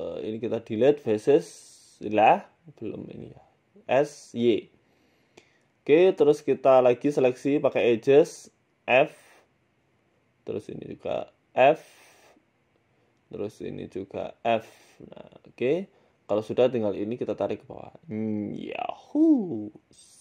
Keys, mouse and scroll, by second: 0.1 click, 0.9 Delete, 1.5 middle click, 2.7 click, 3.4 middle click, 3.8 s, 5.2 middle click, 5.5 scroll down 1, 5.5 middle click, 6.5 click, 7.1 right click, 7.4 shift+right click, 8.0 middle click, 8.4 shift+right click, 8.8 right click, 9.2 shift+right click, 10.1 f, 10.2 middle click, 10.9 right click, 11.4 shift+right click, 11.8 middle click, 12.6 shift+right click, 13.1 f, 13.2 middle click, 14.0 a, 14.1 a, 14.4 alt+shift+right click, 14.7 middle click, 15.2 f, 15.5-15.9 scroll down 7, 15.7 middle click, 16.2 middle click, 16.6 KP_1, 17.1-18.2 scroll up 6, 17.5 click, 18.4 g, 19.7 l, 20.1 g.